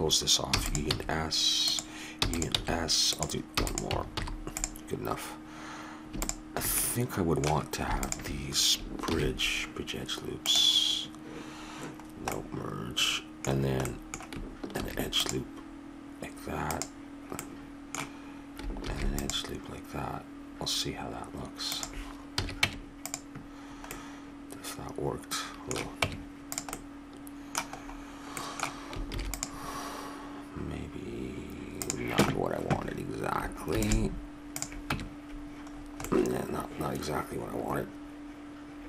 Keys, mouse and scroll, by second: 0.5 e, 0.9 s, 2.1 e, 2.7 s, 3.5 e, 4.1 alt+m, 6.2 click, 6.8-8.6 middle drag, 8.6-10.2 drag, 9.1 ctrl+e, 12.0-14.0 middle drag, 14.7 ctrl+r, 18.8 ctrl+r, 22.3 a, 22.6 Tab, 23.9 middle click, 25.0 middle click, 25.4-26.7 middle drag, 26.0 Tab, 29.1 ctrl+r, 33.6 ctrl+r, 34.9 Tab, 35.7 middle click.